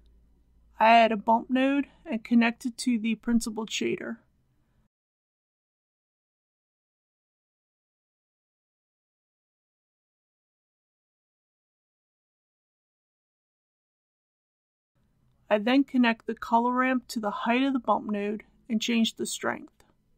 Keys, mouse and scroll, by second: 0.5 click, 1.9 scroll down 1, 2.4-3.5 scroll up 1, 4.4-4.9 shift+scroll down 1, 5.1 scroll down 1, 5.5-7.8 shift+scroll up 1, 7.8 a, 10.4-14.9 drag, 15.7-16.5 scroll down 1, 16.5-17.9 middle drag, 18.2-19.9 drag.